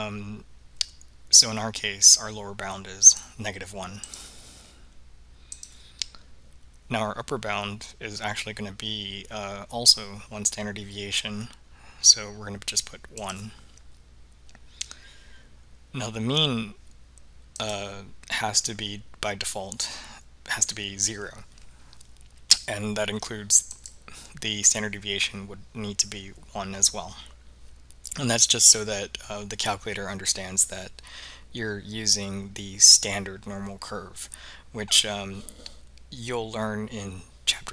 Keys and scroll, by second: 4.1 1, 5.6 Return, 13.3 1, 17.7 Return, 23.8 Return.